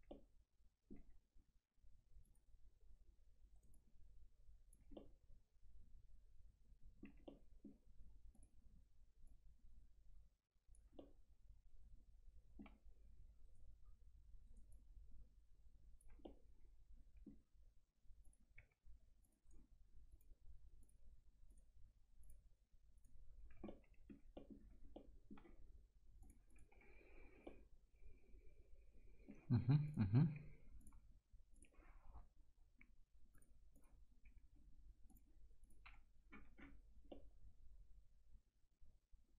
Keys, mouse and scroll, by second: 0.1-2.2 alt+middle drag, 2.2 click, 3.6 right click, 3.7 click, 5.0-7.3 alt+middle drag, 7.3 middle click, 8.3-11.0 drag, 11.0-13.5 alt+middle drag, 13.5 right click, 14.7-16.2 drag, 16.2-18.2 alt+middle drag, 18.2 click, 18.6 1, 19.2 click, 19.5 right click, 20.1 click, 23.4 scroll down 1, 23.7 alt+middle click, 24.3 middle click, 24.6 scroll down 1, 24.9 alt+middle click, 26.2 click, 26.7 F4, 27.0 scroll down 1, 27.4-29.6 alt+middle drag, 29.6 scroll up 1, 29.9 click, 31.9-32.2 scroll up 1, 33.3 click, 34.3 F4, 35.1 click, 35.8 F4, 36.0-36.6 scroll down 1, 37.4-39.3 alt+middle drag.